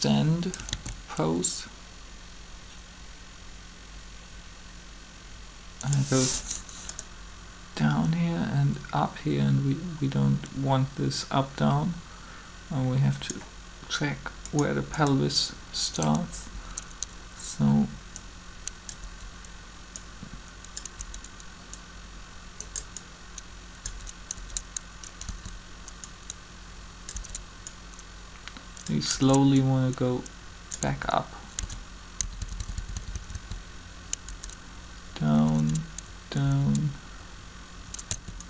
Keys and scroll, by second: 0.7 alt+a, 16.4 Up, 18.9 Up, 20.9 Up, 23.6 Up, 24.2 Up, 25.2 Down, 27.1 Up, 30.8 Up, 31.6 Down, 32.2 Down, 35.4 Up, 36.4 Up, 38.1 Down.